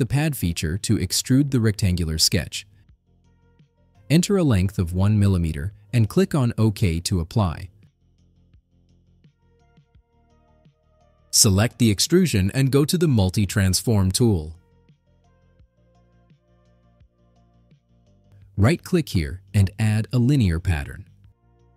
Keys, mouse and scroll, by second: 0.9 click, 2.8 middle click, 2.8 scroll up 2, 4.4 1, 4.8 click, 9.7 click, 12.4 click, 17.5 click, 19.0 right click.